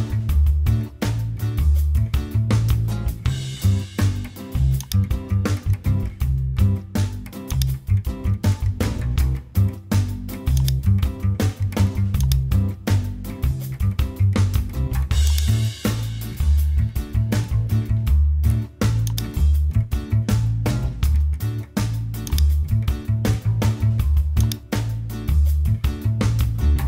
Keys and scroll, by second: 2.4 Return, 9.4 super+t, 12.8 Return, 17.8 super+j, 20.4 super+t.